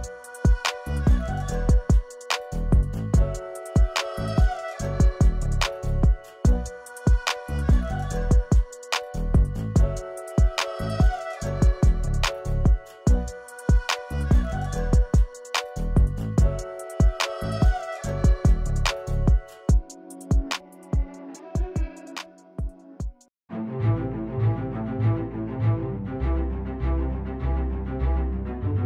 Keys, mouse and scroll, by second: 6.1 ctrl+z, 7.7-8.1 drag, 17.2 v, 17.5 click, 18.4 ctrl+[, 22.4 click, 23.4 shift+click, 23.7 right click, 25.2 click, 28.4 click.